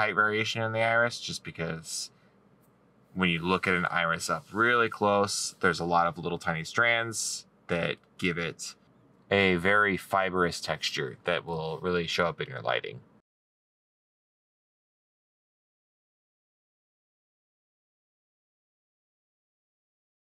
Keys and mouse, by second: 14.9 middle click, 17.7 right click.